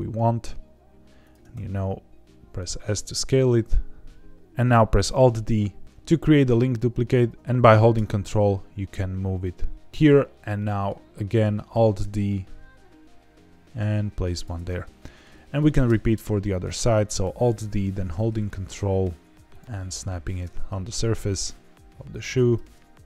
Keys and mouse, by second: 1.2 ctrl+click, 1.5 s, 4.9 alt+g, 5.1 alt+d, 10.5 middle click, 11.1 middle click, 11.7 alt+d, 14.3 ctrl+click, 14.6 middle click, 15.5 alt+d, 19.4 ctrl+click, 19.7 middle click, 20.2 alt+d, 22.0 ctrl+click, 22.5 alt+d.